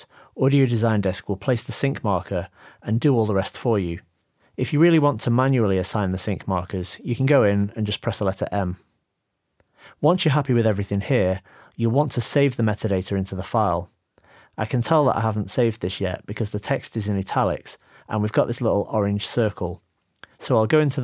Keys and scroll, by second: 0.0-2.0 typing, 3.1 u, 7.7 m, 9.4 m, 10.6 m, 12.7 m.